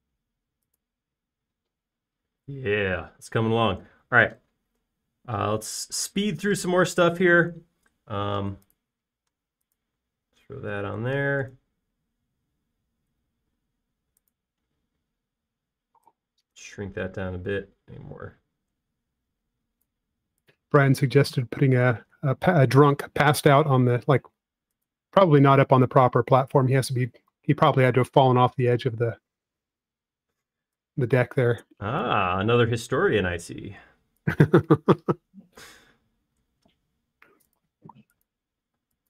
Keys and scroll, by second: 6.9 space, 24.4 super+b, 30.4 space.